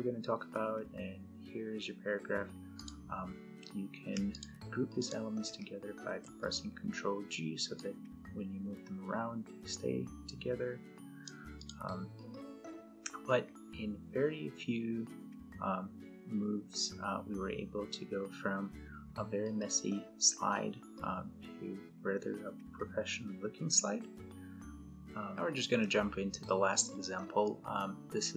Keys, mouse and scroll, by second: 2.5 click, 5.8 ctrl+g, 7.5 click, 7.6-11.3 click, 25.5 F10.